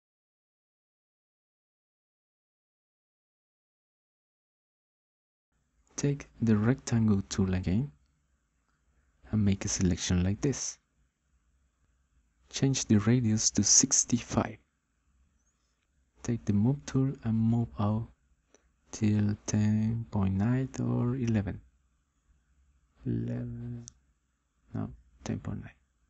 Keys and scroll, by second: 15.8 6, 16.3 5, 17.5 Return.